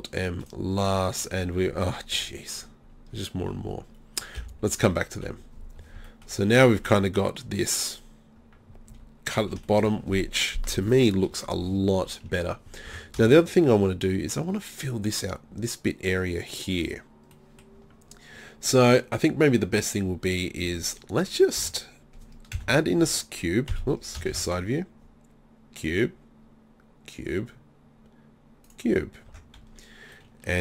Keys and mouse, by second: 3.2 z, 4.4 KP_1, 5.3 KP_3, 8.9 z, 9.4 z, 12.9 Tab, 20.7 Tab, 21.6 Tab, 22.6 KP_1, 23.7 KP_3, 24.3 shift+a, 29.3 Tab.